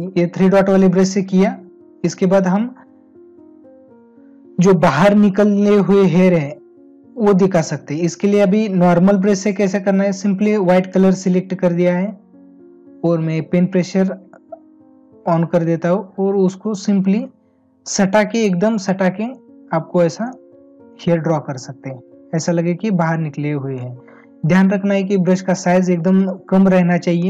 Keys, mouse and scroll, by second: 21.3 space, 25.3 space.